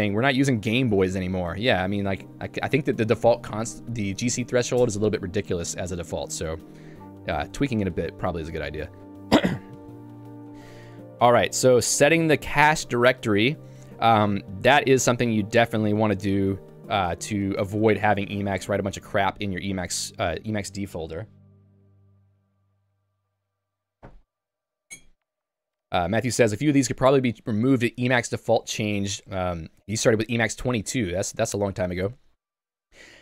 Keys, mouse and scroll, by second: 2.4 Escape, 6.5 Escape, 6.8 j, 8.3 ctrl+d, 10.5 j, 12.9 k, 14.8 j, 16.5 k.